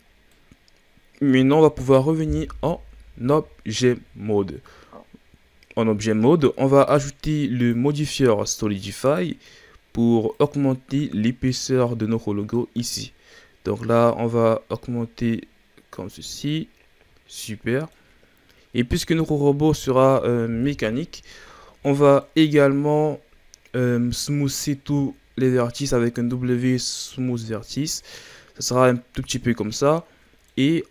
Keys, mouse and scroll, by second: 0.0 scroll down 2, 0.2-1.8 middle drag, 1.8 KP_1, 2.7 Tab, 3.3 scroll up 1, 4.1-7.3 scroll up 1, 7.5-9.0 drag, 10.4-10.9 drag, 10.9 scroll down 1, 11.1-13.9 middle drag, 13.9-16.4 drag, 16.4-18.9 middle drag, 18.9-20.5 drag, 20.5 KP_1, 21.8-22.8 middle drag, 22.8-23.8 scroll up 2, 23.8-24.9 shift+scroll down 3, 24.9 w, 28.2-30.9 middle drag.